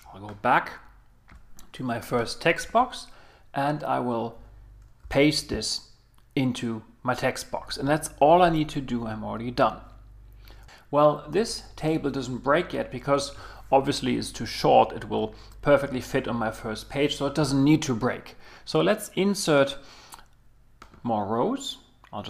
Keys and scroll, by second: 5.0 super+v, 8.1 Escape.